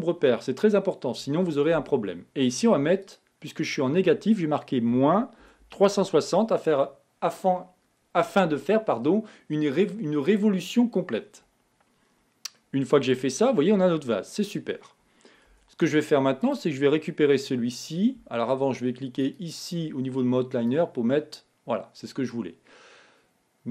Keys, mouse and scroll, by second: 3.6-6.4 drag, 12.9-15.8 middle drag, 15.8 Tab, 16.8 click, 19.6-22.6 drag.